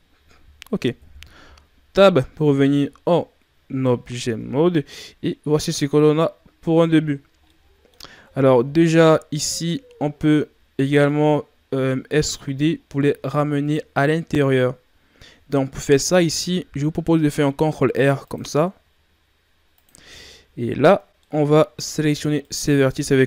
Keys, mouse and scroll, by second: 1.0 KP_1, 2.1-2.8 scroll down 6, 2.8-3.4 scroll down 3, 3.9 shift+scroll down 2, 5.5-6.0 shift+scroll up 7, 6.4-6.8 scroll up 7, 7.0-7.5 shift+scroll down 6, 7.5-7.9 middle drag, 7.9 scroll up 3, 8.2 Tab, 8.7-9.0 shift+scroll down 4, 9.0 middle click, 9.4 scroll up 2, 10.8 middle click, 11.6-12.5 scroll up 2, 12.8-13.3 scroll down 2, 16.3 ctrl+r, 21.1-22.4 middle drag, 22.4 alt+right click.